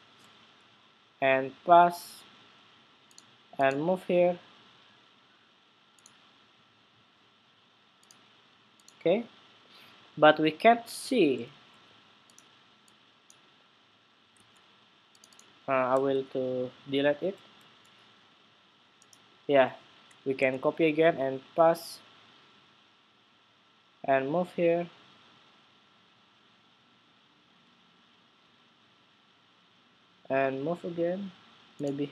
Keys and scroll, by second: 0.0 super+c, 1.4 super+v, 11.2 super+z, 14.0 super+z, 20.2 super+c, 21.2 super+v.